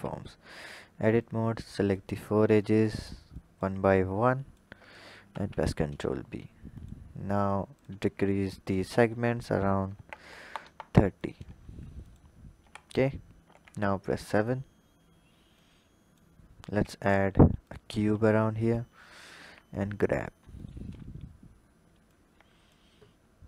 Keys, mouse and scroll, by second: 1.0 click, 2.4 shift+click, 3.1 shift+click, 4.1 shift+click, 5.1 ctrl+b, 7.5-11.0 drag, 11.9-12.5 drag, 12.5 Tab, 13.2 KP_7, 13.8-15.4 scroll down 9, 15.4-16.6 drag, 16.6 shift+a, 17.9 s, 19.2 g, 20.8-21.9 scroll up 1, 21.9 click, 23.3 click.